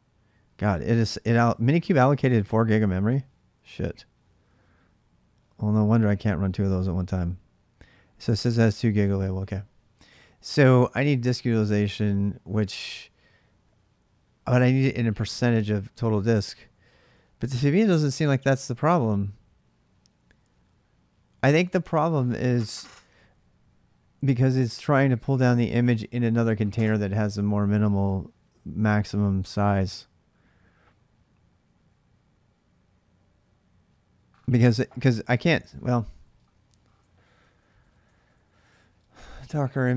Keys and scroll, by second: 16.2-17.0 typing, 17.6 Return, 35.8-39.9 typing.